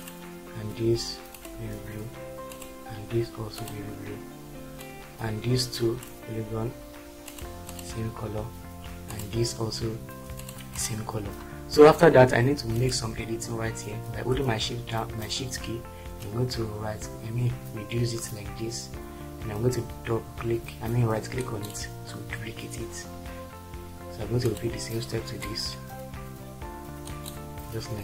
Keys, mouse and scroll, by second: 9.3 click.